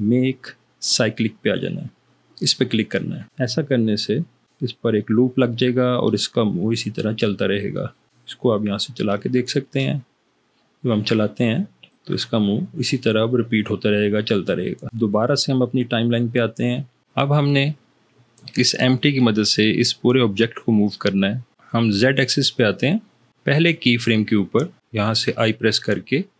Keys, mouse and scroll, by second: 9.8 space, 15.0 space, 15.4 click, 25.2 i.